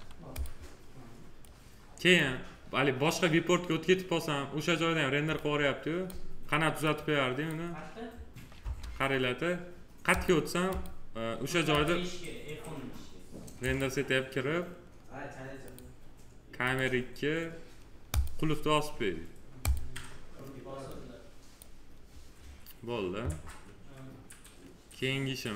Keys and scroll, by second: 8.5 space.